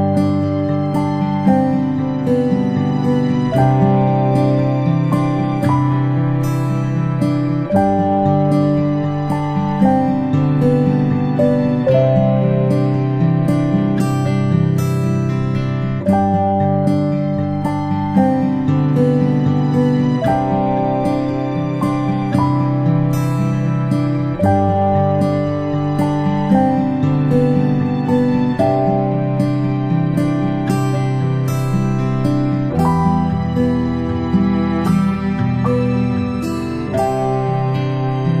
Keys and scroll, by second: 35.5 ctrl+i, 36.8 ctrl+z.